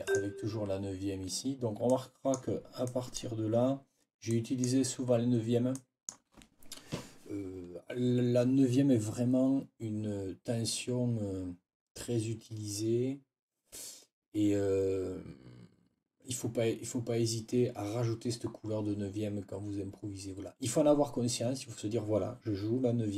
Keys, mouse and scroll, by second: 1.8-3.1 scroll up 2, 3.1 click, 4.2 click, 5.6 click.